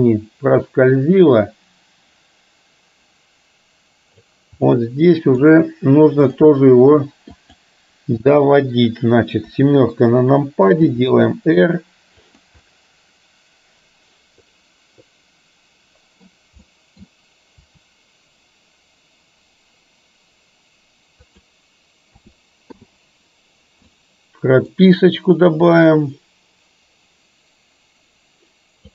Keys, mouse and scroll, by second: 4.8-5.4 middle drag, 7.4 click, 9.5 KP_7, 11.0 r, 12.6-16.4 middle drag, 16.8-17.8 middle drag, 17.8 r, 22.9 a, 22.9 i, 24.0 middle click, 25.8-28.9 drag.